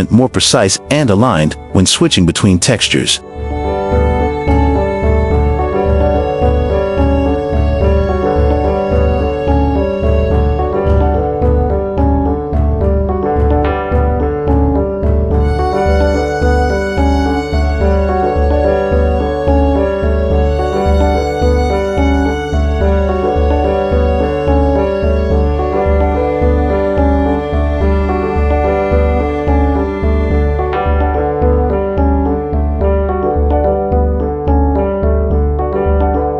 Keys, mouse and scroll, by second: 2.7-3.0 ctrl+shift+KP_Add, 3.3 shift+middle click, 3.6 shift+middle click, 4.6 ctrl+shift+KP_Add, 4.7 ctrl+shift+KP_Add, 4.8 ctrl+shift+KP_Subtract, 5.0 ctrl+shift+KP_Add, 5.1 ctrl+shift+KP_Subtract, 5.2 ctrl+shift+KP_Subtract, 5.5 ctrl+shift+KP_Add, 5.7 ctrl+shift+KP_Subtract, 6.2 middle click, 6.8 middle click, 7.3 middle click, 8.3 ctrl+shift+KP_Add, 9.2 middle click, 11.4 shift+middle click, 12.8 x, 14.5 shift+middle click, 14.9 shift+middle click, 16.1 shift+middle click, 18.4 Tab, 18.6-19.7 drag, 19.7 Tab, 20.7 Tab, 22.3 g, 22.8 click, 24.1 shift+middle click, 24.7 q, 25.8 g.